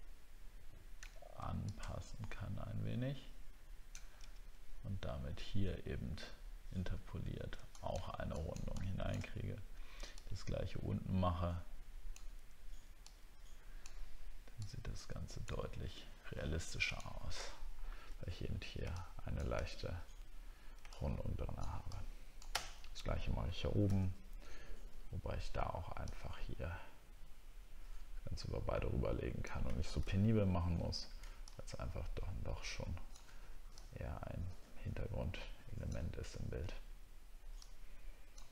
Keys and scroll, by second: 17.4 alt+scroll down 1.